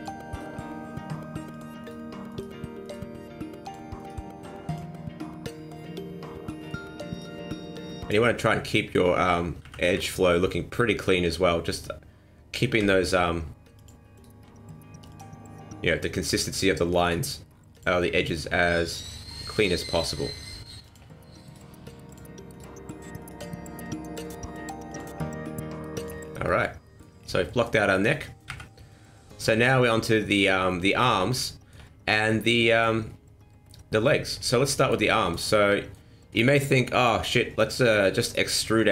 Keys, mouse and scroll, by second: 0.3 right click, 0.5 g, 1.8 right click, 2.3 right click, 2.8 right click, 3.0 g, 4.0 right click, 4.3 g, 5.4-5.7 scroll down 1, 5.7 middle click, 7.1 right click, 7.4 g, 8.2 middle click, 8.2 scroll up 1, 9.6 KP_1, 9.9 KP_3, 11.7 right click, 12.8 g, 14.1 right click, 14.4 g, 17.0 right click, 17.3 g, 18.3 right click, 18.4 g, 19.2 g, 20.0 right click, 20.1 g, 21.4 right click, 21.7 g, 22.5 right click, 23.2 right click, 23.4 g, 24.2 right click, 24.5 g, 25.3 g, 26.2 scroll down 4, 26.5 middle click, 27.0 scroll down 3, 27.5 middle click, 27.7 scroll up 1, 28.5 KP_1, 29.7 shift+middle click, 30.4 scroll up 1, 31.5 shift+middle click, 32.2 middle click, 33.1-33.4 scroll down 3, 33.7 middle click, 34.3 scroll up 3, 34.6 middle click, 35.1 shift+middle click, 35.5 scroll up 2, 35.7 middle click, 36.9 click, 37.3 middle click, 37.9 right click, 38.3 shift+right click, 38.6 middle click.